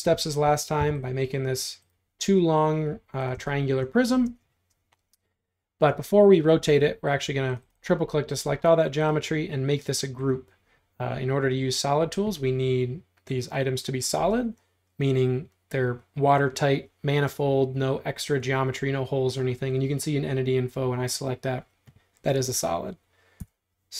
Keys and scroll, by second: 0.1 space, 0.8 p, 4.3 space, 23.4 q.